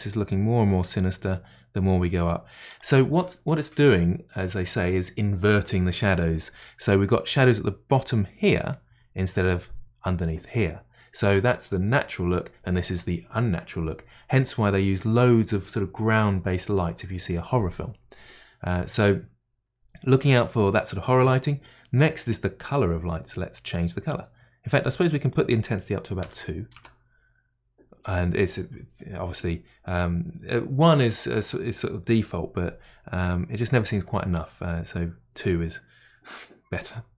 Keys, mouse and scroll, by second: 25.3-37.1 drag.